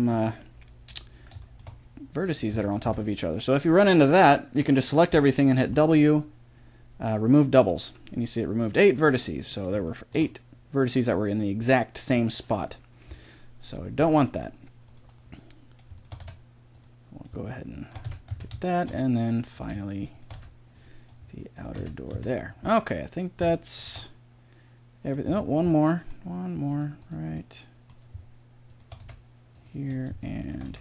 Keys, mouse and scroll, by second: 0.1 middle click, 2.2-3.9 drag, 2.5 a, 2.8 a, 5.7 w, 9.1-13.7 middle drag, 13.7-14.9 drag, 14.9 middle click, 16.2 f, 18.0 f, 18.3 a, 19.0 middle click, 20.3 f, 21.8 f, 22.1 a, 23.8 middle click, 24.6-26.7 middle drag, 29.0 f, 30.7 f.